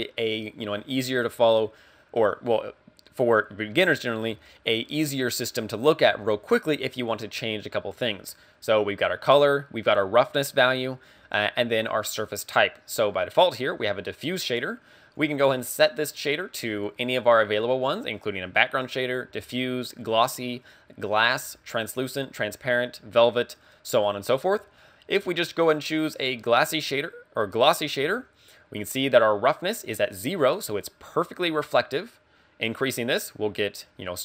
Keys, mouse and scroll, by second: 15.2 click, 32.8 click, 33.2 click, 33.8 click.